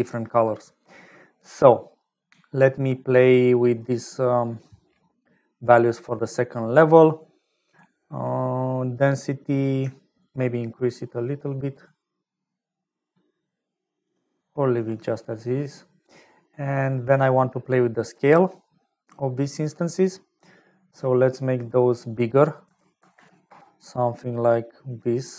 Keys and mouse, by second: 2.7 click, 5.2 click, 10.4-14.1 shift+drag, 14.9 middle click, 17.9 middle click, 18.9 middle click, 19.9 middle click, 21.7-23.7 drag.